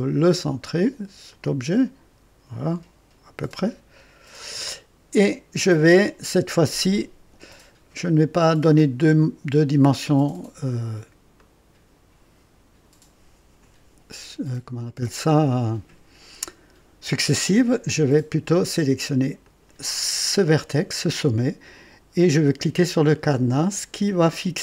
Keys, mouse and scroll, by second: 0.0 click, 1.3-4.7 drag, 5.2 click, 9.0 click, 11.3-13.0 drag, 19.4 click.